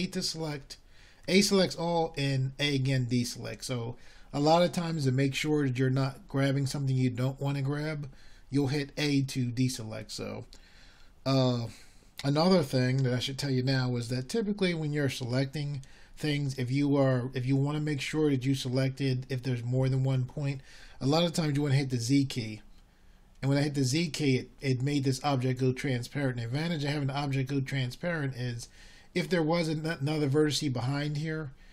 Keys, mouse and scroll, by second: 2.6 a, 3.9 a, 5.5 a, 25.1 z.